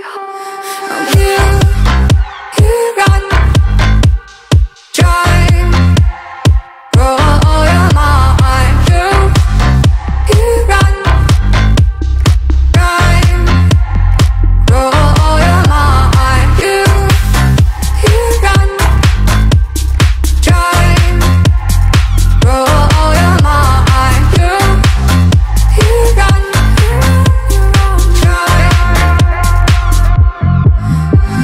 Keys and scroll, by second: 0.9-2.0 typing, 7.9 ctrl+-, 12.3 ctrl+j, 12.9 ctrl+=, 16.5 2, 17.7 [, 17.9 [, 18.8 [, 19.9-23.4 typing, 24.7-25.2 ], 27.0-29.1 typing.